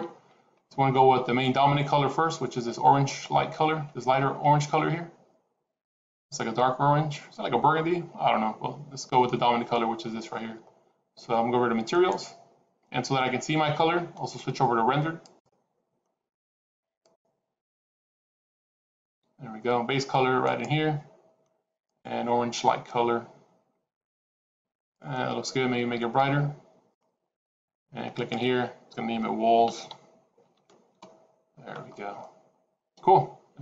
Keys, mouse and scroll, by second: 11.9 click, 17.9 click, 18.1 click, 20.4 click, 28.1 click, 32.1 middle click.